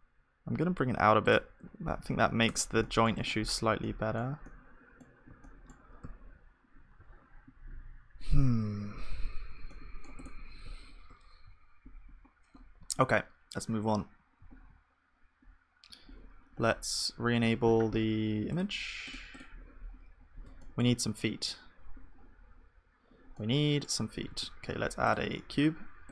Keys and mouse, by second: 1.5 Tab, 1.6 middle click, 2.0 ctrl+s, 2.3-8.8 middle drag, 2.5 Tab, 4.9 click, 6.0 z, 7.0 z, 8.8 z, 9.7-12.2 middle drag, 11.4 click, 11.4 z, 13.9 KP_1, 14.4 z, 16.5-20.2 middle drag, 20.2-21.9 drag, 20.6-21.9 right drag, 21.9-26.1 middle drag, 24.3 shift+a.